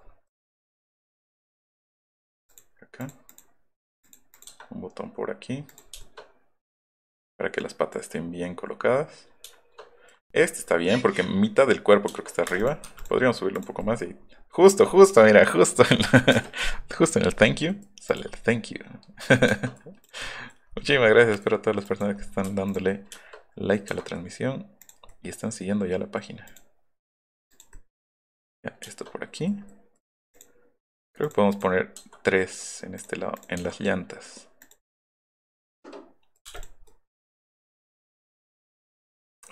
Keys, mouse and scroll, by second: 0.3 middle click, 0.9 middle click, 1.2 middle click, 2.5 click, 3.0 click, 3.3 click, 4.0 click, 4.4 click, 6.1 shift+middle click, 10.1 middle click, 12.5 space, 13.8 scroll down 2, 14.2 middle click, 14.2 scroll, 15.0 middle click, 15.0-15.5 scroll, 15.1 middle click, 15.5 middle click, 16.3 space, 18.3 middle click, 19.4 shift+middle click, 20.3 middle click, 21.0 middle click, 22.7 middle click, 23.1 shift+middle click, 24.8 click, 26.2 click, 26.6 click, 28.1 Escape, 30.3 click, 31.3 click, 31.6 click, 33.0 right click, 33.4 right click, 34.9-36.4 middle drag, 36.5 space, 36.8 middle click, 37.4 middle click, 38.0-39.5 middle drag.